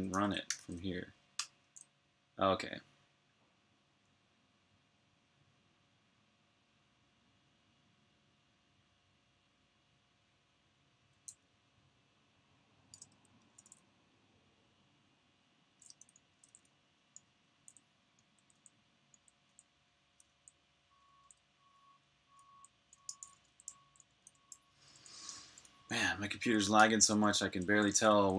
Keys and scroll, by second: 0.0-1.3 typing, 11.2-12.0 typing, 13.2-14.3 typing, 15.8-20.9 typing, 21.9-25.4 typing, 26.4 typing.